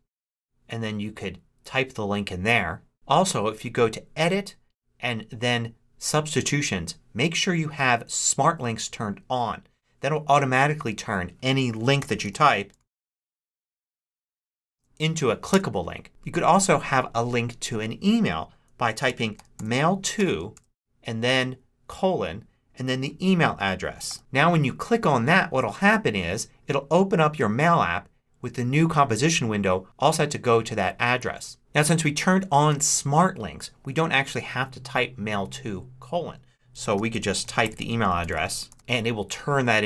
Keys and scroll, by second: 11.6-15.1 typing, 15.4 Return, 18.7-20.9 typing, 24.0 e, 24.2 Return, 36.4-39.2 typing.